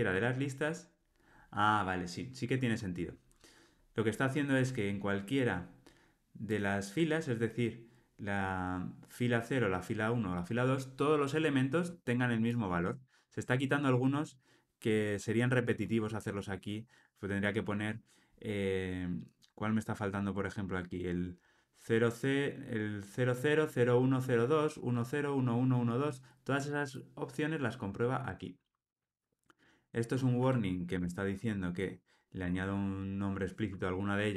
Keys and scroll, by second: 6.5 super+b, 11.5 alt+super+[, 30.9 alt+Return.